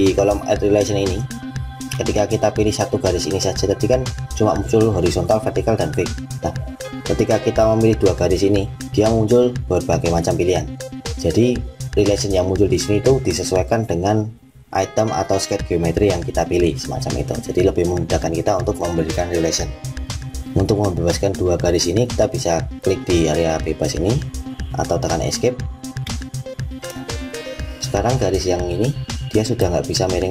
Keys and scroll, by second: 24.9 Escape.